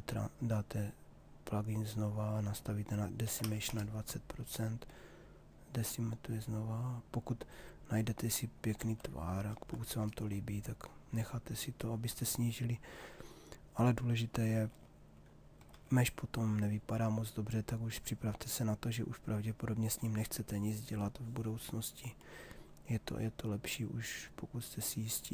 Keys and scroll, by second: 2.9 2, 3.4 0, 3.6 Return, 8.5 ctrl+z, 14.1 shift+f.